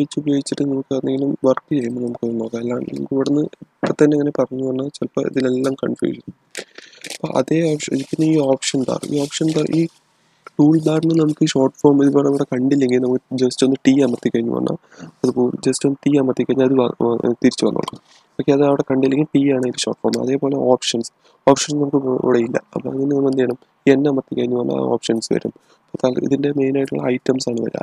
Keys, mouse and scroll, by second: 1.1-4.2 middle drag, 14.6-15.4 typing, 23.6 typing.